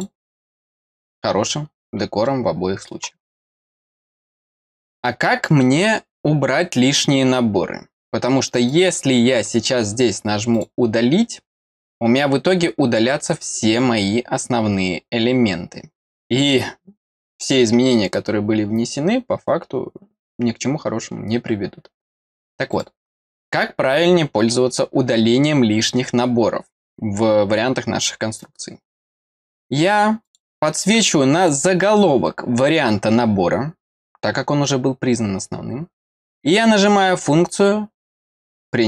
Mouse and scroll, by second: 2.2 middle click, 8.7 click, 10.5 click, 22.7 click, 30.2 click, 31.3 click.